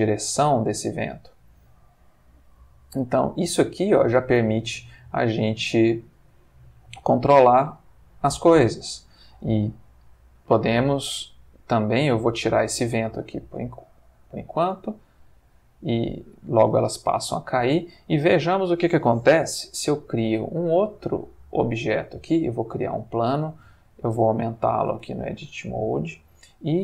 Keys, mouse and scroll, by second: 9.3 Escape, 11.9 click, 12.3 x, 13.1 click, 14.2 click, 14.7 x, 15.1 click, 16.2 click, 17.0 g, 17.8 click, 19.5 shift+a, 21.9 click, 23.4 Tab, 23.6 s, 24.7 click, 25.1 Tab.